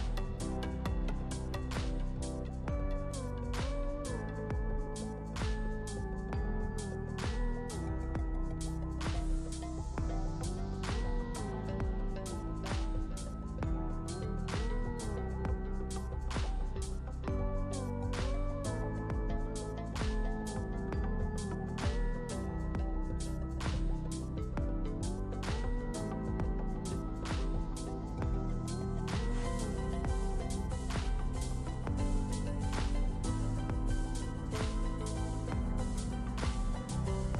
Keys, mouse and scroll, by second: 0.0 ctrl+c, 2.2-2.8 drag, 4.8 click, 7.3 click, 8.4-9.1 drag, 11.0-14.4 drag, 14.4-14.7 alt+drag, 15.6-15.9 alt+drag, 17.3-18.0 alt+drag, 20.2 click, 20.8-21.5 ctrl+space, 21.9-22.2 drag, 24.6-25.3 alt+drag, 26.3 ctrl+space, 26.4 ctrl+click, 26.5-27.7 ctrl+space, 28.6-29.5 drag, 30.7-31.3 drag, 32.8 ctrl+z, 33.2 click, 34.6 click, 36.1 click, 37.0 ctrl+space, 37.1-37.3 ctrl+click.